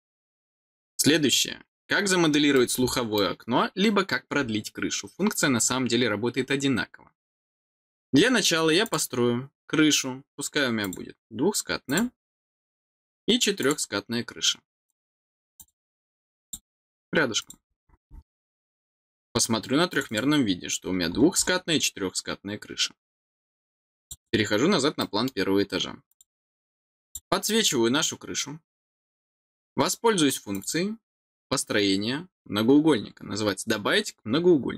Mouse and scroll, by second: 2.5 middle click, 8.8 click, 10.8 click, 11.8 click, 12.2 middle click, 13.5 click, 14.8 click, 15.5 click, 16.4 click, 17.3 click, 18.2 middle click, 19.8 click, 20.0 click, 20.8-21.3 scroll down 1, 23.9 click, 24.1 click, 24.9 middle click, 26.0 click, 27.0 click, 27.6 scroll down 1, 30.5 click.